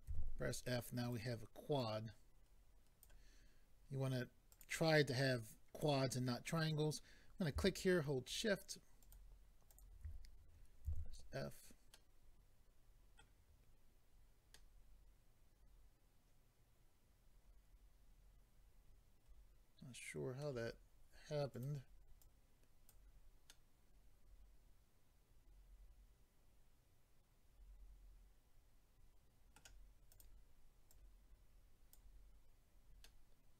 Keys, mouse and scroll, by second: 0.1 f, 1.0 click, 1.8 click, 4.5 click, 8.2 shift+click, 9.0 shift+click, 9.7 shift+click, 10.8 f, 11.9 middle click, 14.5 middle click, 21.5 click, 22.2 click, 23.5 middle click, 30.1 click, 30.9 click, 33.0 middle click.